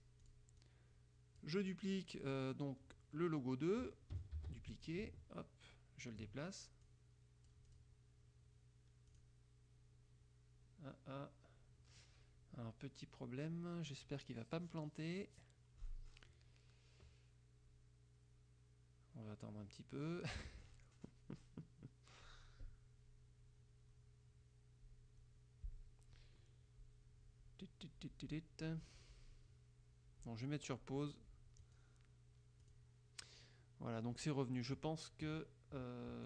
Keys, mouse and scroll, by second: 0.4 click, 0.7-1.7 drag, 4.5 ctrl+d, 5.0-6.5 ctrl+drag, 7.0 click, 9.3 click, 31.8 click, 32.8 click.